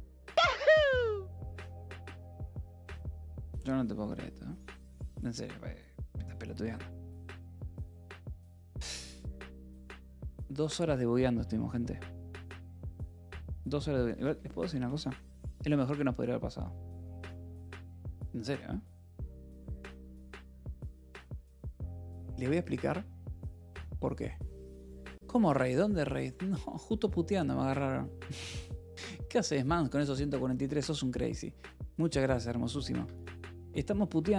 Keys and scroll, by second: 3.0 j, 11.9 Escape, 13.6-15.4 typing, 33.4 Escape, 33.9 k.